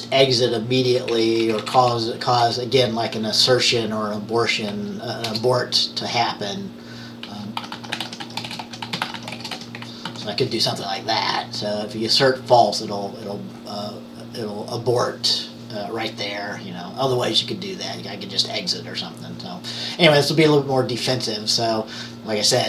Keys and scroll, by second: 0.0-1.1 typing, 2.3-3.0 typing, 4.6-5.8 typing, 7.1-10.6 typing, 12.4-13.1 typing.